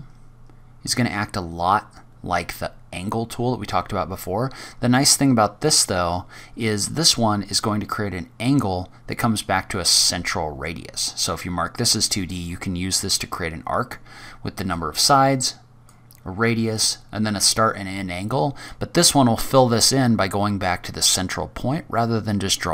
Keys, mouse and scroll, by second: 11.1 click, 14.6 click, 16.7 click.